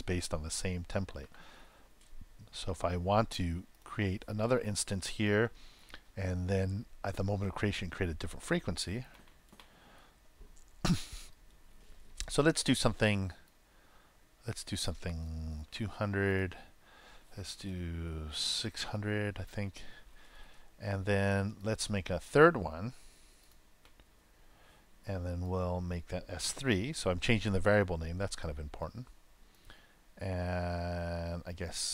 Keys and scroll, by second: 22.9 super+c, 23.8 super+v.